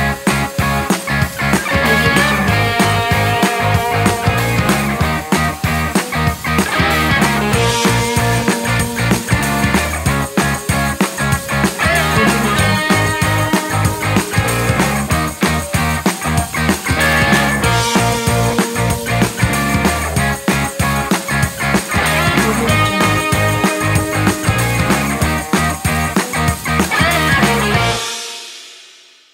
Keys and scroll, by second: 1.4 super+z, 20.9 space, 26.8 space.